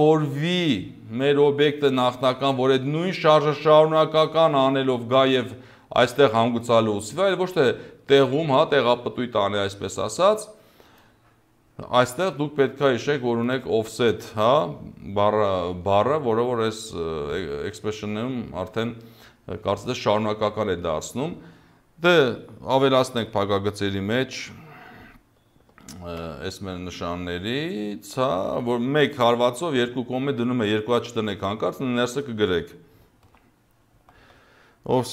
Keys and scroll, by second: 26.1 shift+', 33.3 o, 34.0 f.